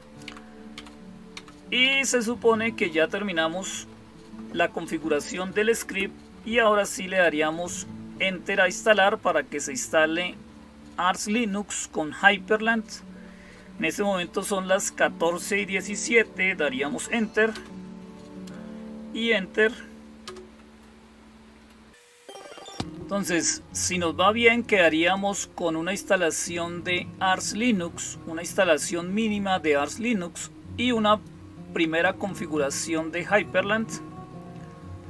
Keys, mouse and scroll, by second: 0.1 Down, 0.6 Down, 1.2 Down, 1.7 Up, 1.9 Up, 17.4 Return, 24.8 click, 30.9 click.